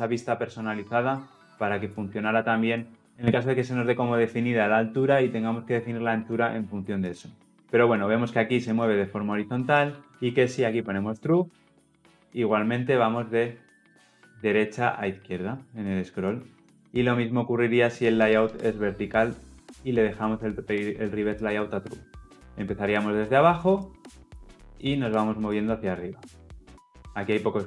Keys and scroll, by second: 14.1 ctrl+F10, 19.9 Return, 21.6 ctrl+F10.